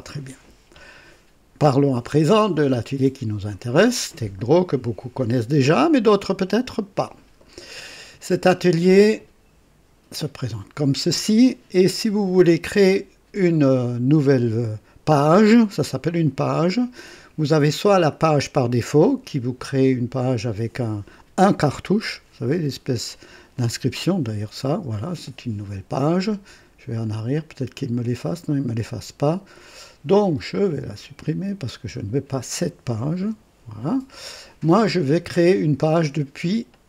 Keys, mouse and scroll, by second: 6.6 click, 23.5 click, 27.0 click, 28.4 click, 31.0 click, 32.3 click, 33.2 Delete.